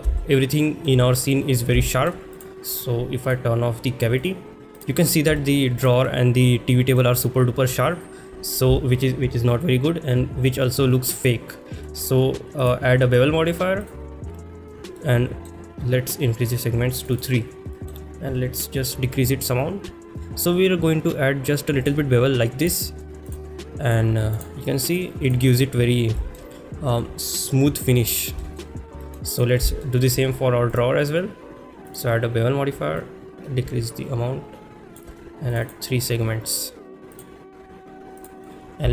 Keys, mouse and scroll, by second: 0.2 shift+middle click, 1.1 middle drag, 1.8 shift+middle drag, 2.4 click, 3.4-4.4 drag, 4.8 click, 5.4 shift+middle click, 5.8 click, 6.1-7.0 middle drag, 7.2 click, 12.7-13.9 drag, 15.0-15.5 middle drag, 17.0 click, 17.1 click, 17.8 middle click, 19.2-22.0 shift+drag, 25.0-25.3 right drag, 26.2 shift+middle drag, 28.4 shift+middle drag, 29.0 middle drag, 29.4 click, 29.8 shift+middle drag, 30.7 click, 31.0-32.0 drag, 33.0-35.1 shift+drag, 35.5 click, 35.6 click, 36.5-37.3 right drag, 38.2 click, 38.4 click.